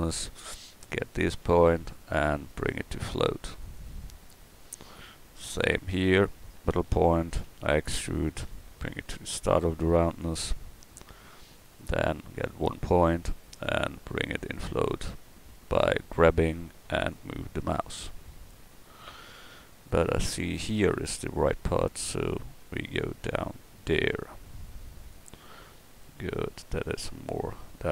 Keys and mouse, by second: 1.4 g, 4.1 middle click, 7.5 e, 11.8-13.2 drag, 13.2 g, 22.0 g.